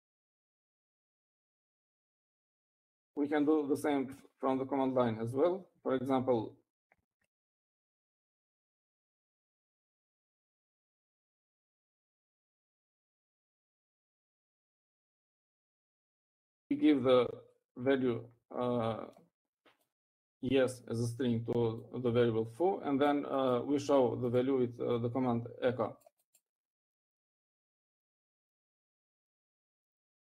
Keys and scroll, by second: 0.0-2.4 typing, 3.6-4.4 typing, 5.9 typing, 7.0-7.7 typing, 8.9-11.5 typing, 13.3-16.0 typing.